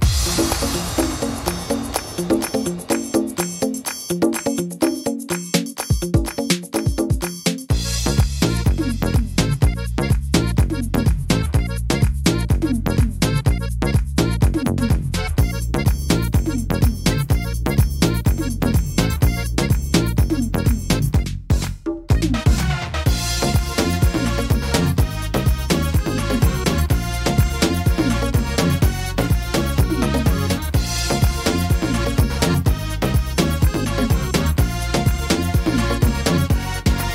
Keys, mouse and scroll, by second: 1.0 click, 2.9 alt+s, 4.8 middle click, 5.2 scroll down 2, 5.7 middle click, 6.2 scroll down 2, 6.6 middle click, 7.1 shift+middle click, 7.4-7.9 scroll up 6, 8.1 middle click, 9.0 right click, 9.4 shift+right click, 9.8 right click, 10.3 right click, 10.6 right click, 11.0 right click, 11.8 shift+d, 13.4 click, 15.2 e, 17.9 click, 20.2-20.9 scroll down 8, 20.8 middle click, 21.2-22.0 shift+scroll up 3, 21.3 shift+middle click, 22.0 middle click, 22.4 shift+middle click, 23.4 click, 24.7 middle click, 25.3 middle click, 26.0 shift+middle click, 26.3-26.9 scroll up 3, 26.8 middle click, 28.0 scroll up 1, 28.1 middle click, 28.7 right click, 29.1 shift+right click, 29.5 shift+right click, 30.4 click, 31.5 middle click, 32.9 ctrl+r.